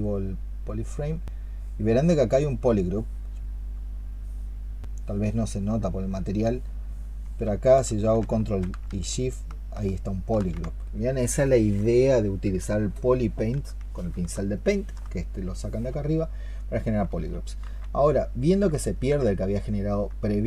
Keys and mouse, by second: 0.2 double click, 9.1 ctrl+shift+click, 10.1 ctrl+shift+click, 14.4 alt+click, 19.0 ctrl+z.